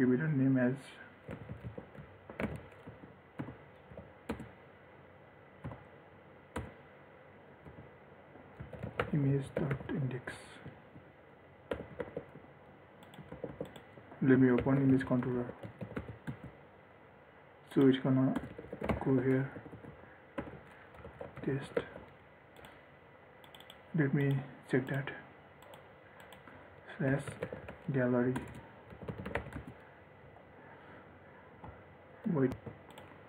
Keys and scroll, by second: 12.1 ctrl+s, 14.7 ctrl+shift+n, 22.0 ctrl+s, 32.7 ctrl+s.